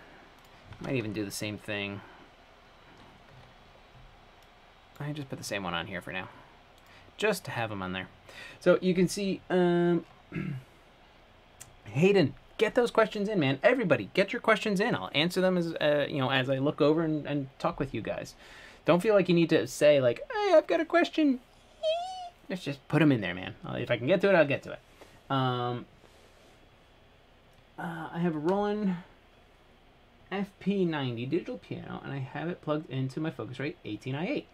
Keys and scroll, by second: 3.9 Escape.